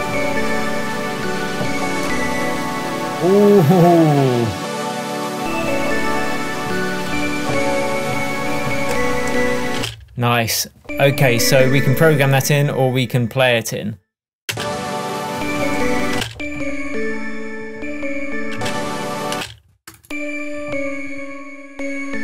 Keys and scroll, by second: 9.8 space, 14.5 space, 16.2 space, 18.6 space.